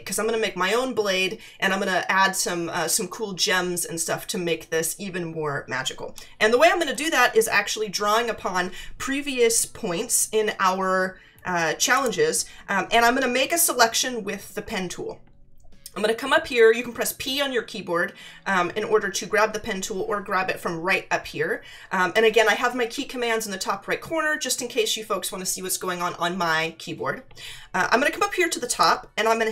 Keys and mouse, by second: 11.9 click, 28.7 click.